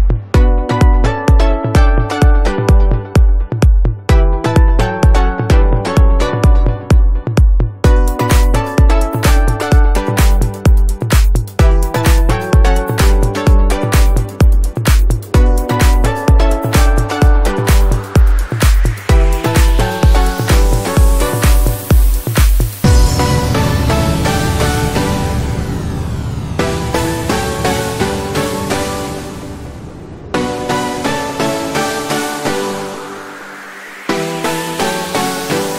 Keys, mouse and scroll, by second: 0.5 right click, 0.7 click, 3.0-7.6 drag, 8.6-11.7 drag, 11.7 right click, 11.8 click, 12.9 click, 14.3 click, 15.3 click, 15.3 ctrl+click, 16.7 right click, 16.9-18.8 drag, 19.1 [, 19.2 click, 19.5 space, 19.6-33.3 drag, 35.3-35.7 drag.